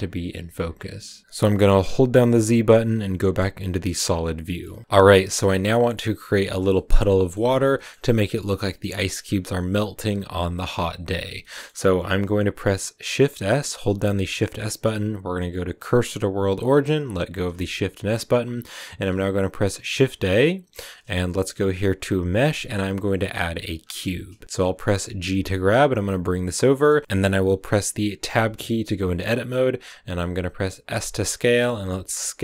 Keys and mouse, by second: 1.7 drag, 2.4 z, 4.7 shift+click, 6.7 shift+click, 7.0 click, 7.7 shift+middle click, 8.4 middle click, 11.3 middle drag, 14.0 shift+s, 20.0 shift+a, 25.2 g, 26.5 click, 28.1 Tab, 30.8 s, 31.8 z.